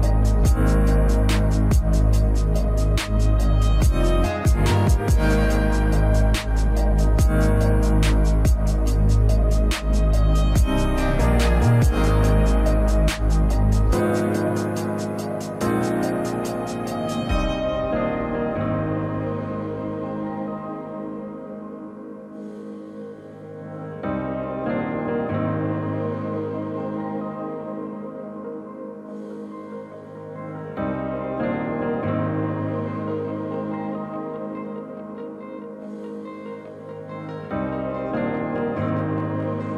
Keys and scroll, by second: 4.6 space, 5.0 space, 9.0 ctrl+c, 15.2 ctrl+z, 23.2-24.0 typing, 25.2 a, 25.6 s, 30.7 ctrl+c, 30.7 ctrl+shift+v, 34.2 s.